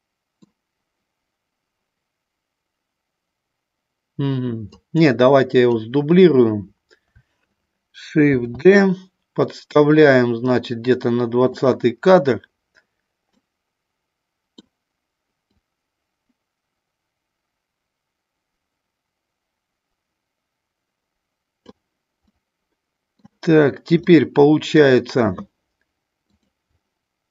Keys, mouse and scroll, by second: 4.6 click, 8.4 shift+d, 13.2-14.6 middle drag, 15.5-21.8 drag, 22.2 middle click, 24.0 middle click.